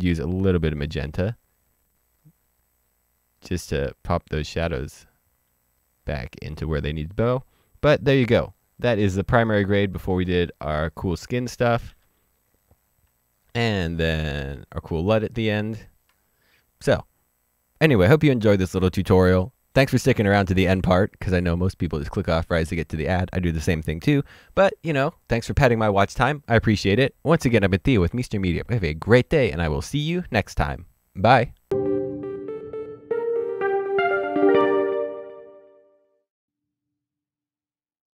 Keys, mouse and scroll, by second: 1.3 ctrl+z, 6.4 click, 8.1-9.2 scroll down 1, 9.2 click, 11.9 ctrl+d, 13.7 click, 14.5 ctrl+d.